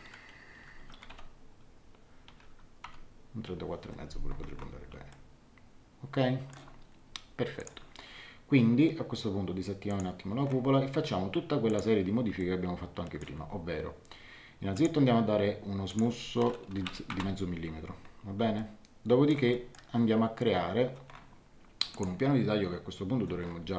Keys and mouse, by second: 0.5 BackSpace, 0.7 KP_4, 0.9 ., 1.1 KP_9, 2.3 BackSpace, 2.8 KP_5, 5.1 middle click, 7.5 click, 9.9 click, 11.6 click, 12.4 middle click, 14.7 click, 15.9 click, 16.5-17.3 typing, 18.5 middle click, 21.9 click.